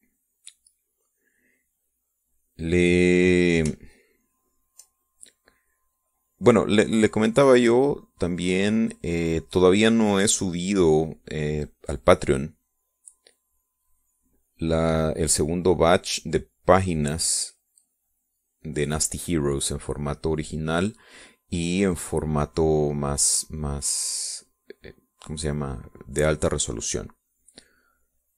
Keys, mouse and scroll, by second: 6.2-6.6 shift+scroll up 1, 6.6-12.5 drag, 12.8-13.8 drag, 14.2-15.5 drag, 16.0-19.9 drag, 20.2 middle click, 20.7 middle click, 21.3 middle click, 22.1 middle click, 24.5-28.3 drag.